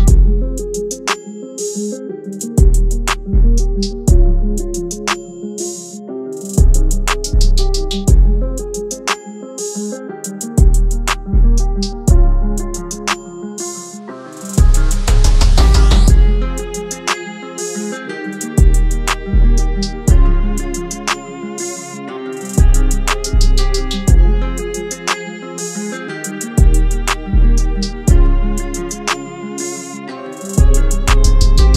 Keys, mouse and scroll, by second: 15.4 right click, 17.0 double click, 21.8 right click, 23.2 double click.